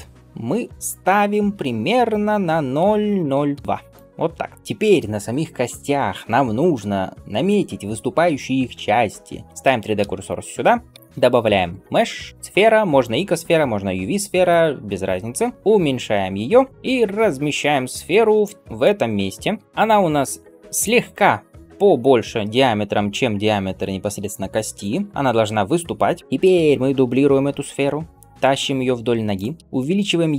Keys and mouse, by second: 0.7-15.5 drag, 0.7-15.1 middle drag, 0.7-4.5 right drag, 10.8 shift+a, 15.1 s, 15.5-30.3 middle drag, 15.5 s, 16.7 g, 17.9 g, 19.4 s, 20.0 s, 27.4 shift+d.